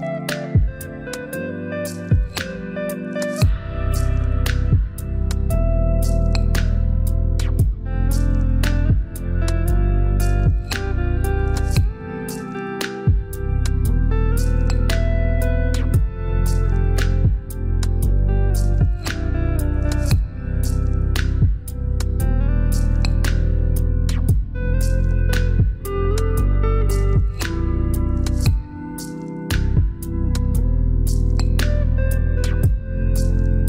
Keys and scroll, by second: 31.6 2, 32.0 0, 32.9 Return.